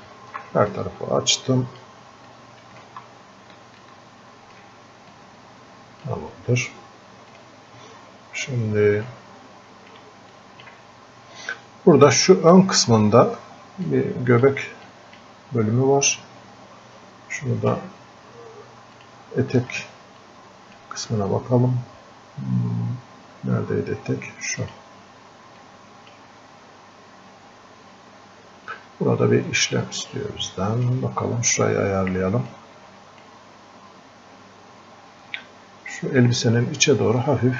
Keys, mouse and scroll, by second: 1.0 click, 2.6 click, 4.1-5.1 alt+drag, 7.3 click, 8.3 scroll up 1, 9.1 alt+click, 10.3-13.9 drag, 13.9 click, 19.0-23.0 drag, 24.6-27.8 drag, 27.8-28.5 scroll up 1, 28.8-29.2 scroll down 1, 29.8-32.5 drag, 32.5-36.7 drag.